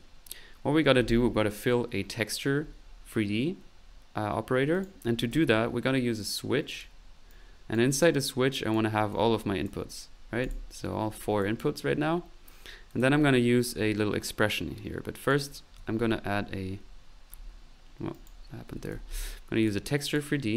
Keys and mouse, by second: 4.7 right click, 4.9-5.8 typing, 6.2 click, 6.7 click, 7.3 right click, 8.1 click, 9.1 click, 10.2 middle click, 10.4 click, 11.4 click, 12.9 click, 12.9-13.7 typing, 15.2 right click, 15.7 ctrl+t, 17.4 Escape, 18.1 right click, 18.4-19.4 typing, 18.6 right click, 18.8 click, 19.6 click.